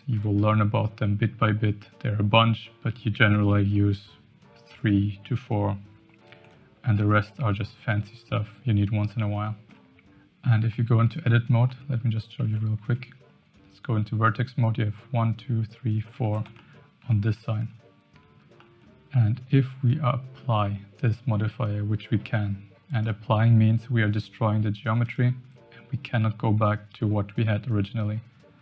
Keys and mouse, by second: 0.1 click, 7.0-7.3 middle drag, 9.4 shift+middle drag, 10.7-11.0 shift+middle drag, 11.3 Tab, 11.6 middle click, 12.4 a, 12.8 1, 16.5 shift+middle click, 18.6 middle click, 19.5 Tab, 22.9-25.1 drag, 28.0 Tab.